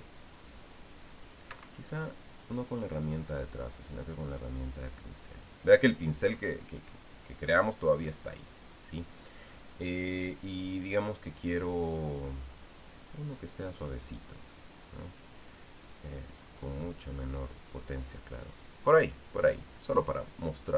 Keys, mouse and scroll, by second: 2.3 Escape, 4.3 click, 5.7 click, 14.6 click, 17.4-19.0 drag.